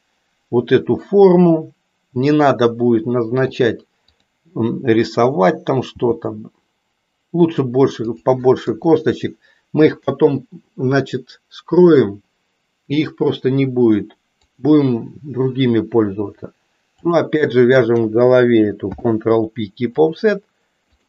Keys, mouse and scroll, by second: 2.4-3.5 drag, 4.0 click, 5.8 g, 8.6 KP_3, 14.3 click, 16.9 shift+click, 18.8 ctrl+p, 20.9 click.